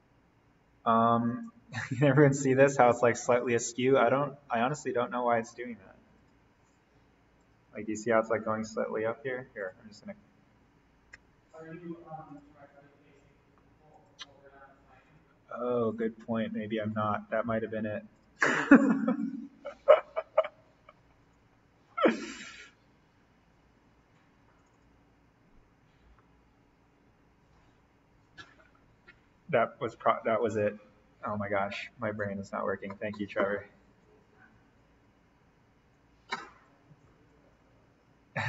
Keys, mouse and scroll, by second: 1.6-3.6 scroll up 1, 5.1-6.1 scroll down 1, 6.1 click, 11.2 Delete, 12.3 click, 16.9-18.1 scroll down 1, 18.1 click, 21.2 click, 24.6 click, 29.9-31.1 scroll up 1, 32.1 click, 33.5-34.0 scroll down 1, 34.0-36.7 drag, 36.7-37.2 scroll down 1, 37.2-38.4 drag.